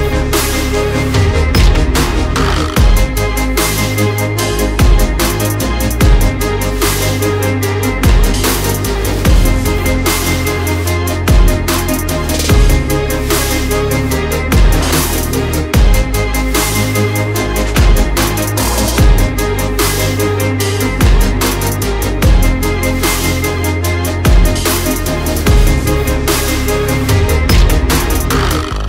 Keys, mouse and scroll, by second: 0.0 alt+click, 2.4 click, 4.1 right click, 4.7 click, 8.3 shift+click, 13.7 right click, 14.2 click, 14.9 alt+scroll up 1, 15.4 alt+scroll down 1, 16.2 click, 17.4 alt+click, 19.3 shift+Right, 19.4 shift+Right, 19.5 shift+Right, 19.6 shift+Right, 19.7 shift+Right, 19.8 shift+Right, 21.0 alt+click, 23.4 shift+Up, 23.8 shift+Down, 25.2 click, 26.0 double click, 26.1 click, 27.3 click, 27.5-27.9 alt+scroll down 1, 27.9 alt+scroll up 1, 28.2 alt+click.